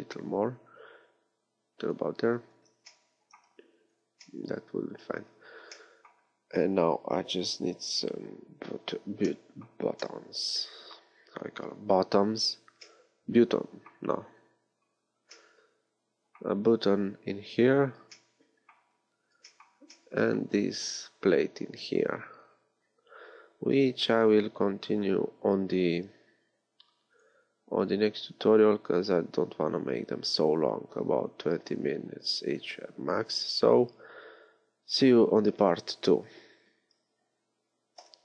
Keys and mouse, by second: 2.7 z, 3.8 z, 22.5 middle click, 25.7-38.2 drag.